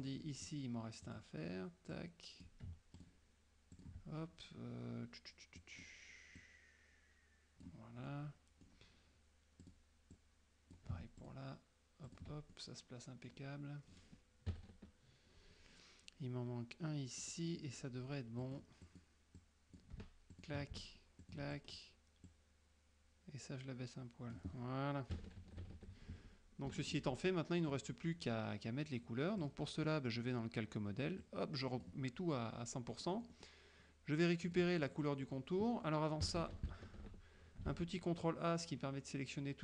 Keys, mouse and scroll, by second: 0.0 middle click, 1.2 click, 2.0 click, 3.1 ctrl+click, 3.8 ctrl+click, 5.7 click, 6.5-7.9 drag, 8.2 scroll up 1, 8.4 middle click, 9.7 click, 10.3 click, 11.3 ctrl+click, 12.2 ctrl+click, 12.6 ctrl+middle click, 14.6 KP_Subtract, 17.3 middle click, 18.5 click, 19.0 click, 19.5 click, 20.5 ctrl+click, 21.3 ctrl+click, 22.4-24.6 drag, 25.2 KP_Subtract, 26.7 F1, 26.8 click, 27.3 click, 29.5 click, 31.3 click, 33.0 middle click, 33.0 scroll up 1, 34.5 click, 34.9 middle click, 36.3 KP_Subtract, 37.8 ctrl+a.